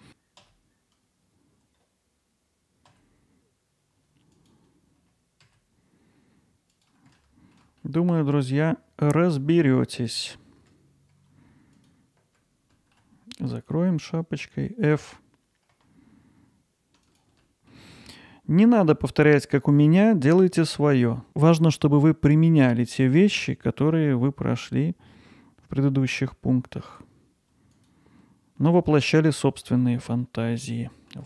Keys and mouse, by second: 4.4 click, 6.7 click, 7.2 alt+middle click, 7.8 ctrl+alt+middle click, 8.4 middle click, 10.0 click, 12.7 alt+middle click, 17.4 alt+middle click, 27.7 click, 29.2 alt+middle click, 29.7 alt+z, 30.2 alt+middle click, 30.7 ctrl+alt+middle click.